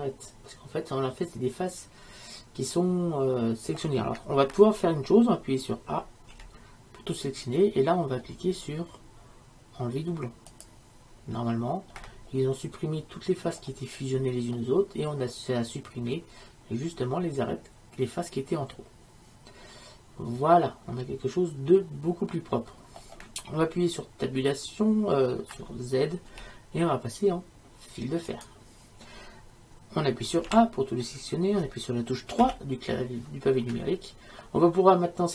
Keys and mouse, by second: 0.0 middle click, 6.4 a, 12.2-13.7 middle drag, 14.8-16.7 middle drag, 26.4 z, 30.5 a, 32.5 KP_3.